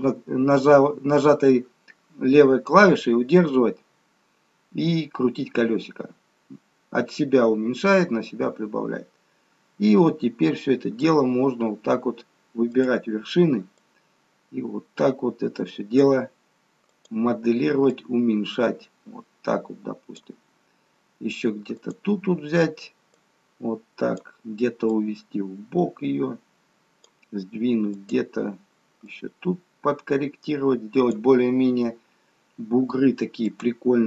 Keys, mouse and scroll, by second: 12.8 click, 14.1 click, 16.9 click, 18.1 click, 21.8 click, 23.3 click, 29.1 click, 33.6 click.